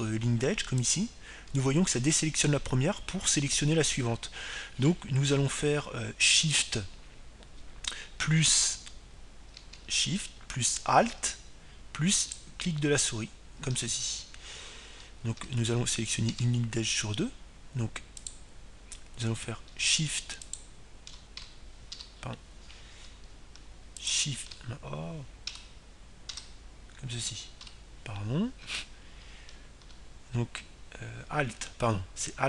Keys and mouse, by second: 2.4-6.4 right drag, 13.9-16.3 right drag, 17.0 Tab, 18.0 Tab, 19.9-21.9 right drag, 22.1-24.0 right drag, 23.7 a, 25.7-27.6 right drag, 27.3 Tab, 28.0 Tab, 29.3 a.